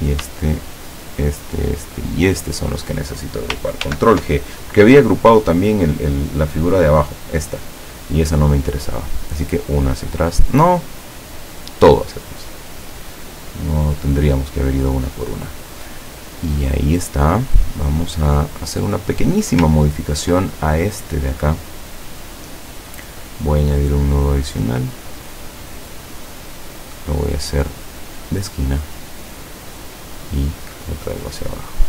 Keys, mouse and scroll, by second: 1.0 shift+click, 1.6 shift+click, 2.2 shift+click, 3.9 ctrl+g, 6.6-6.9 scroll down 2, 7.9 scroll up 2, 9.5 click, 11.6 click, 17.8 click, 18.6 click, 19.9-20.2 ctrl+scroll up 2, 23.1 click, 24.3-26.6 drag, 27.0 click, 28.3 click, 29.9-31.3 drag.